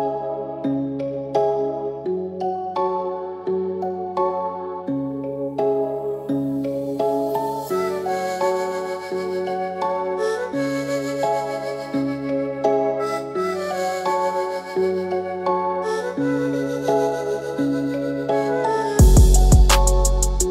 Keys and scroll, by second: 2.5 ctrl+alt+g, 3.4 ctrl+alt+g, 6.5 ctrl+g, 17.1 ctrl+alt+shift+], 19.5 Left, 19.7 Left.